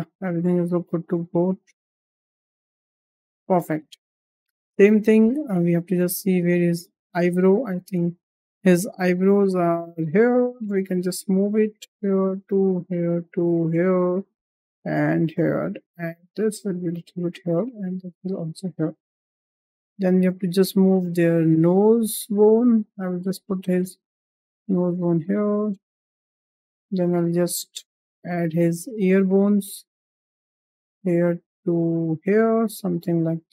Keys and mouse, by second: 0.0 g, 2.0 drag, 2.5 g, 4.1 shift+middle drag, 4.6 shift+middle drag, 6.3 click, 7.7 click, 9.1 g, 10.5 click, 10.8 g, 12.0 click, 12.3 g, 13.1 click, 13.4 g, 14.4 click, 14.7 g, 15.9 click, 16.6 g, 17.5 click, 18.0 g, 19.3 shift+middle click, 19.9 shift+middle click, 20.2 click, 21.2 g, 23.3 shift+middle click, 24.0 g, 25.4 click, 26.3 shift+middle drag, 27.4 shift+middle drag, 27.8 drag, 29.1 g, 30.7 drag, 31.3 g, 32.4-32.9 drag, 33.2 drag.